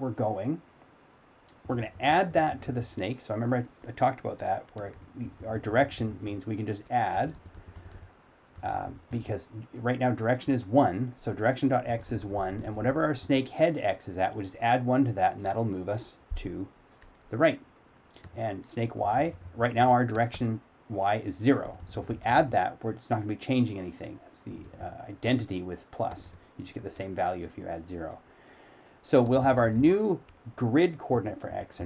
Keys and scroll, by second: 13.9 s.